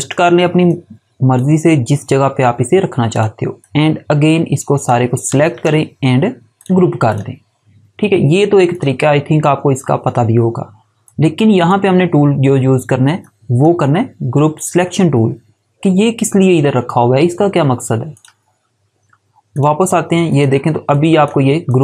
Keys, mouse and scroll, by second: 5.4 right click, 6.5 click, 11.0 click, 18.1 click.